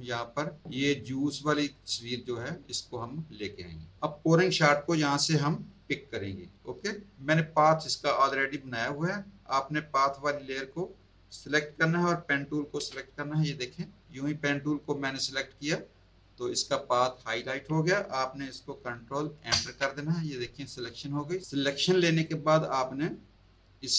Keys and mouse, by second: 1.4 click, 8.5 click, 9.9 click, 12.8 p, 19.5 ctrl+Return.